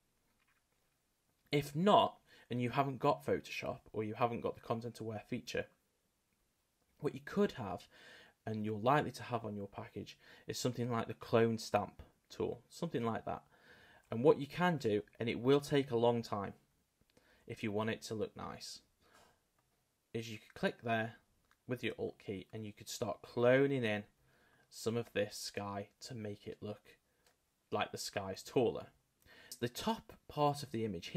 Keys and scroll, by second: 14.6 [, 15.6 ], 17.3 ], 17.8 [, 28.5 super+z.